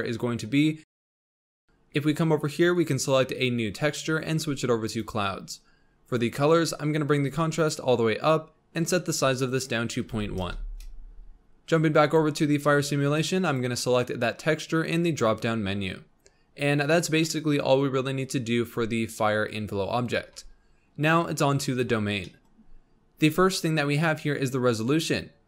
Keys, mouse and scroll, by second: 0.8 scroll up 2, 1.3 click, 2.7-6.3 drag, 6.3-7.2 scroll down 4, 7.3-12.1 drag, 12.7-13.3 scroll down 2, 13.4-16.3 drag, 16.3-17.2 scroll down 5, 17.2 middle click, 17.5-18.2 scroll up 1, 18.2-18.7 scroll up 1, 21.6 click, 22.2-22.5 middle drag, 22.5-24.7 scroll up 2.